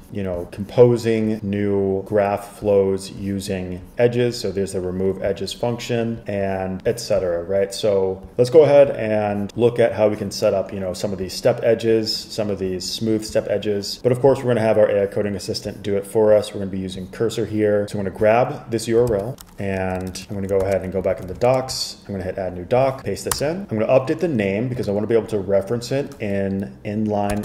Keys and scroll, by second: 19.2 super+c, 19.9-22.0 typing, 23.5 Return, 24.9 space.